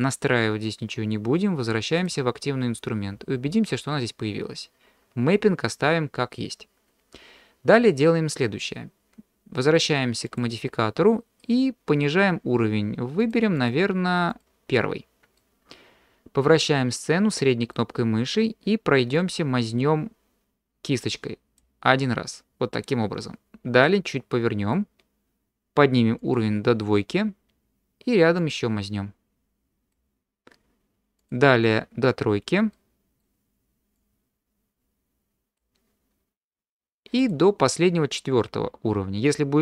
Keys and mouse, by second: 2.0 click, 10.3 click, 13.4 click, 13.6 click, 14.3 click, 15.4-17.7 middle drag, 19.1-21.6 drag, 23.8 middle click, 26.2 click, 28.4-29.9 drag, 32.7 middle click, 33.9-35.6 drag, 37.3 click, 39.3-39.6 drag.